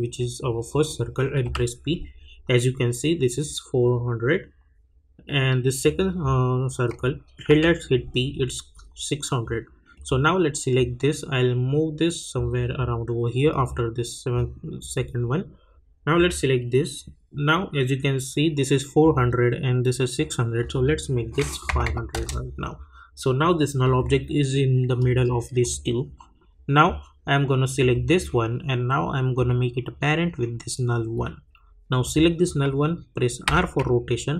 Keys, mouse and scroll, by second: 1.4 p, 5.8 click, 7.5 p, 9.9-13.5 drag, 16.1 click, 20.6 click, 22.1 Return, 23.8 click, 27.8-32.0 drag, 33.4 r.